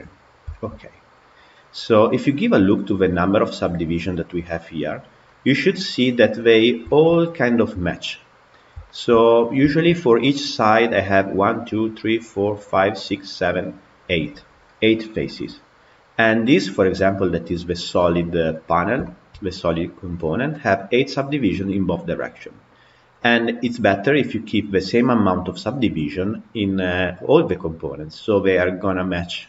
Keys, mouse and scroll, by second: 0.4-3.6 shift+middle drag, 5.1-8.4 middle drag, 8.4 scroll up 1, 8.7-9.2 shift+middle drag, 9.2 scroll up 1, 9.5-10.4 shift+middle drag, 10.4-13.4 scroll up 1, 15.3-16.2 scroll down 1, 16.2 click, 18.9-23.6 shift+middle drag, 23.6-26.3 scroll down 1, 26.3-26.6 scroll down 1.